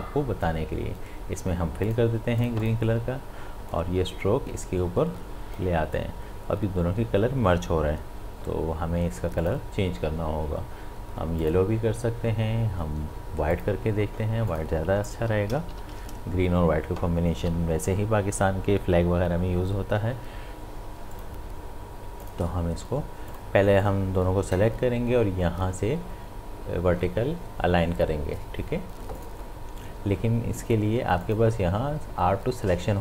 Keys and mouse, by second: 9.4 click, 15.7 ctrl+], 17.4 v, 21.1 v, 21.2-27.0 drag, 29.2 click.